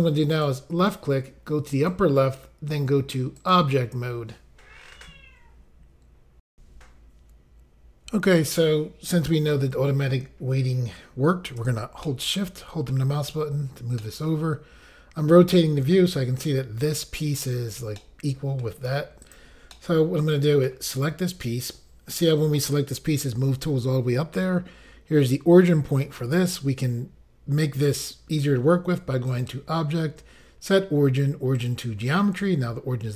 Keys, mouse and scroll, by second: 0.4 click, 0.5 click, 1.8 click, 1.9 click, 3.4 click, 3.5 click, 6.5 Pause, 12.0 shift+middle click, 14.0 middle click, 17.9 middle click, 19.2 click, 19.3 click, 19.7 middle click, 29.3 click, 29.4 click, 31.6 click, 31.7 click.